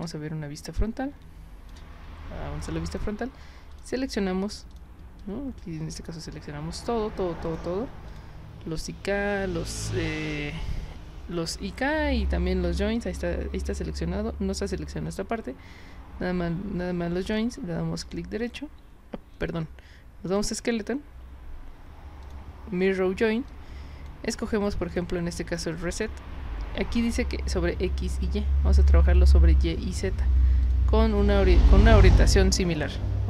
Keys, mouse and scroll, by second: 0.1 space, 0.8-1.7 drag, 2.9 click, 3.7 click, 4.7 click, 5.2-6.1 drag, 7.5 click, 8.1 click, 18.0 right click, 20.3 click, 22.2 click, 23.5-24.1 drag, 24.9 click, 25.5 click, 28.8 click, 30.6 click, 31.3 click.